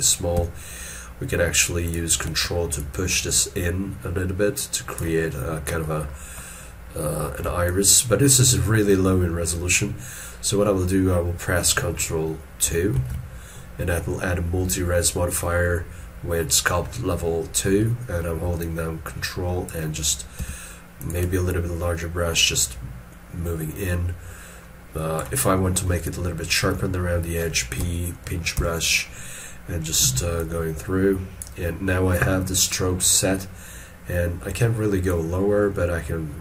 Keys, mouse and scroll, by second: 2.8 ctrl+click, 5.3-5.8 scroll down 1, 7.1-7.4 scroll up 1, 7.4 scroll, 7.7 ctrl+click, 18.6 ctrl+click, 20.4 f, 21.5 ctrl+click, 26.0 ctrl+click.